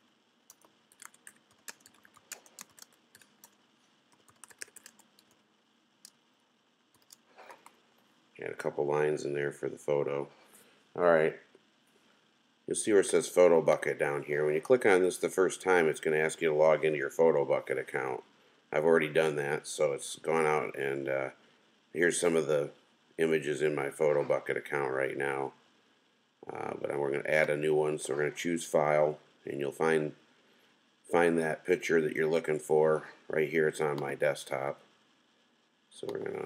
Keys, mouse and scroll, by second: 0.0-5.3 typing, 6.9-7.5 typing.